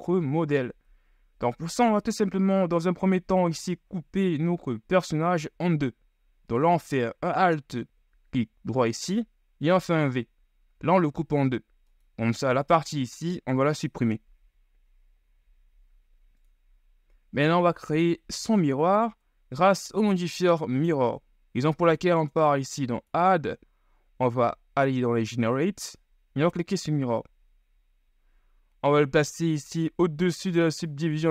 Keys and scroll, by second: 14.4 l, 15.5 Delete, 19.3 Tab.